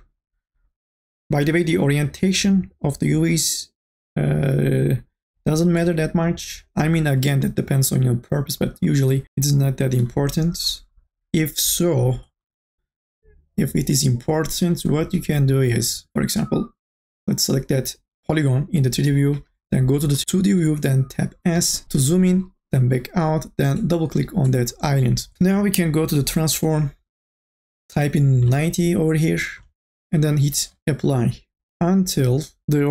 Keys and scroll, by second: 21.8 s, 28.2 KP_9, 28.7 KP_0, 29.8 KP_0.